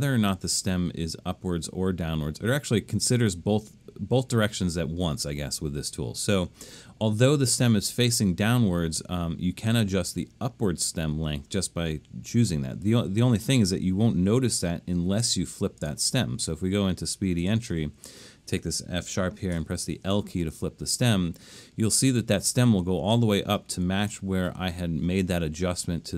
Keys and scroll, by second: 18.0 Right, 18.1 Right, 19.5 |.